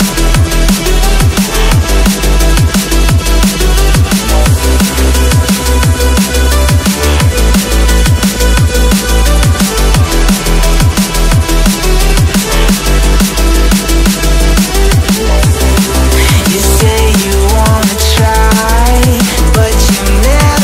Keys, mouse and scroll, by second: 1.7-2.0 scroll down 1, 4.2 scroll down 1, 4.4-5.0 scroll up 1, 8.6 alt+scroll down 1, 8.7 alt+scroll up 1, 9.8-10.4 scroll down 2, 10.4 alt+scroll up 1, 10.5 alt+scroll down 1, 13.8 ctrl+z, 14.3 right click, 19.4 double click.